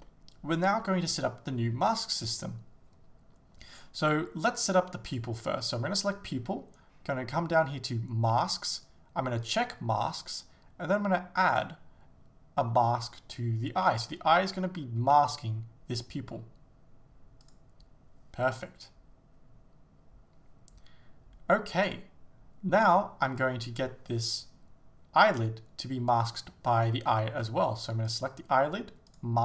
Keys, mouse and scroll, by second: 0.1 shift+middle click, 5.1-6.4 drag, 9.4-29.4 drag, 25.2-26.9 scroll down 1.